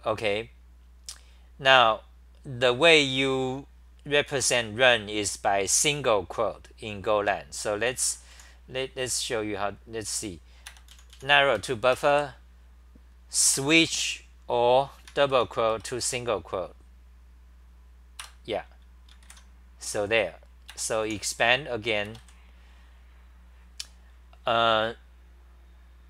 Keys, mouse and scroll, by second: 8.3 ctrl+g, 8.3 h, 9.0 6, 11.6 ctrl+g, 15.8 Return, 21.1 Return.